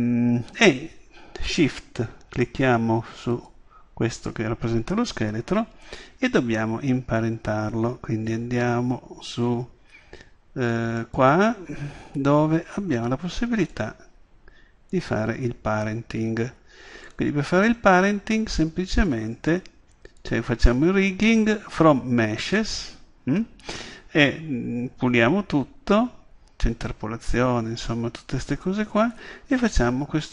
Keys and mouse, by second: 3.4 click, 11.0-13.9 drag, 14.0 click, 14.4-15.6 drag, 17.1-19.0 drag, 27.9-29.8 drag.